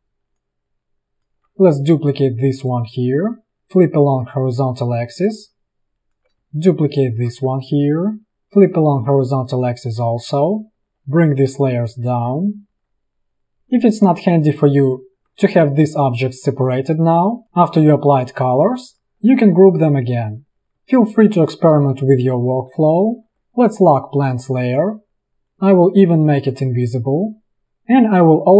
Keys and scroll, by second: 6.5 space, 7.5 v, 10.8 ctrl+[, 19.4 ctrl+g, 22.4 ctrl+[, 27.6 v.